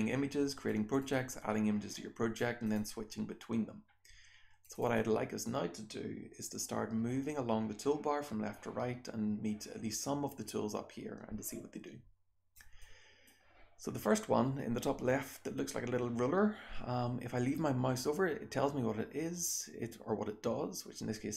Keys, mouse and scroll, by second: 2.3 click, 2.7 click, 4.6 click, 4.8 click, 12.8 click.